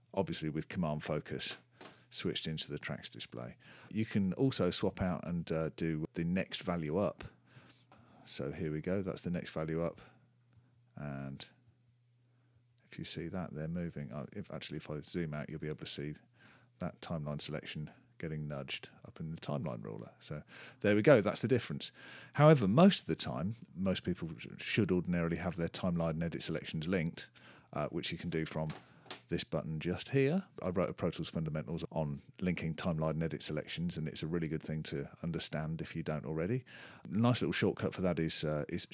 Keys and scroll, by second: 7.9 m, 9.9 ,, 10.5 /, 11.6 /, 12.5 m, 14.5 super+[, 16.9-19.8 typing.